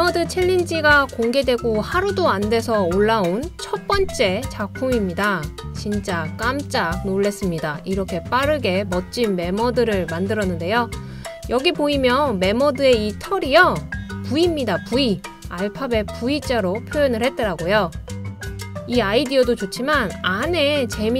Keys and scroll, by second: 18.8 super+z.